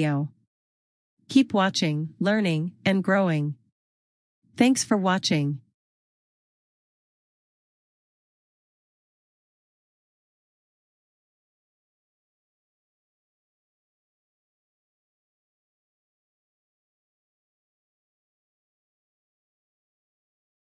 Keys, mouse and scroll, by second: 0.7 click, 7.4 click, 11.9 click, 16.8 click.